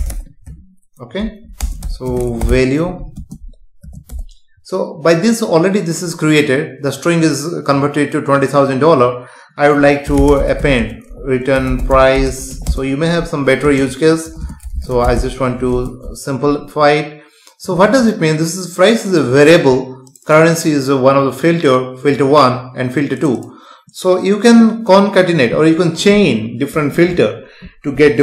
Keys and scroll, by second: 0.5 Tab, 1.6 space, 2.9 Right, 3.2 space, 4.1 Return, 10.8 space, 13.4 Right, 13.7 space, 15.9 ctrl+s.